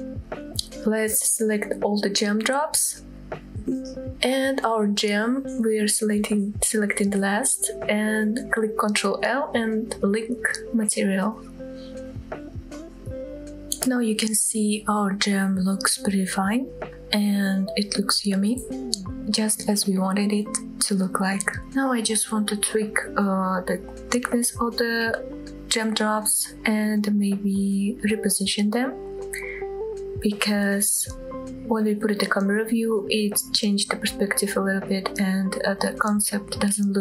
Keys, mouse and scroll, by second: 0.6 shift+click, 1.3 shift+click, 1.8 shift+drag, 2.5-3.6 shift+drag, 4.3 shift+click, 6.7 shift+click, 8.1 ctrl+l, 14.4-15.2 drag, 16.1-17.0 scroll up 3, 20.6-21.4 scroll down 3, 21.6 click, 21.6 scroll up 2, 21.8 middle drag, 22.1 shift+middle drag, 22.4 middle click, 22.9 click, 23.2 shift+middle click, 23.6 shift+click, 24.5 middle click, 24.7 scroll up 1, 25.0 g, 25.1 z, 25.8 shift+drag, 25.9 middle click, 26.3 shift+middle click, 26.7-27.2 shift+middle drag, 27.2 click, 27.3 middle click, 27.5 KP_7, 27.7-28.0 scroll down 1, 28.0 g, 29.1 drag, 29.5 g, 30.2 drag, 30.5 g, 30.8 click, 31.2 click, 31.3 g, 31.5-31.9 drag, 31.9 middle drag, 32.1 scroll up 2, 32.3 shift+middle drag, 32.6 Tab, 32.8 middle click, 33.1 click, 33.3 middle click, 33.7 g, 33.8 z, 34.2-35.0 scroll up 14, 35.0-35.6 scroll down 3, 36.1-36.4 scroll down 2, 36.4-37.0 scroll up 3.